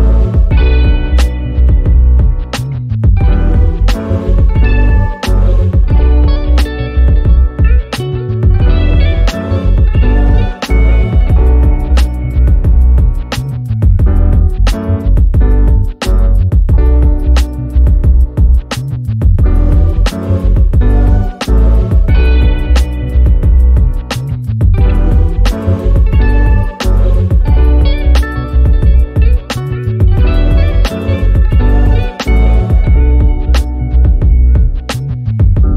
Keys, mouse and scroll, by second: 0.8 F1, 1.5-2.1 drag, 4.9 ctrl+d, 4.9-7.8 drag, 6.4-7.0 ctrl+click, 7.8-9.6 drag, 10.1-10.7 click, 11.2-12.1 click, 12.3 v, 13.9 click, 17.1 ctrl+d, 17.5 ctrl+[, 18.2-19.1 drag, 21.1 F7, 22.0 click, 22.6 F1, 22.9 click, 23.4-23.8 ctrl+scroll up 1, 24.0-25.4 drag, 29.4 ctrl+d, 29.7 h, 30.3-31.6 drag, 32.6 ctrl+d, 32.7-33.9 drag.